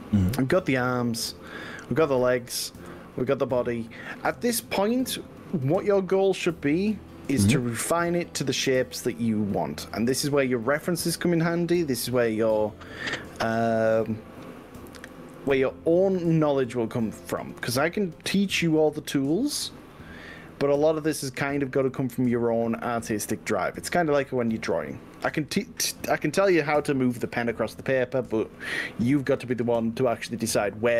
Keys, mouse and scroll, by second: 10.7 scroll up 1, 13.4-14.6 drag, 15.4 g, 18.4 middle click, 20.0 click, 20.6 click, 22.0 g, 23.9 click, 24.5 click, 28.3 click, 29.4 g.